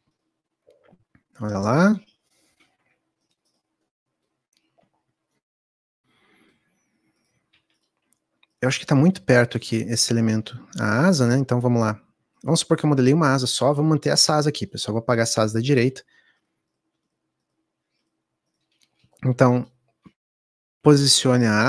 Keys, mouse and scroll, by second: 8.3 click, 12.5 scroll down 2, 12.7-19.6 middle drag, 19.6 shift+click, 20.7 click.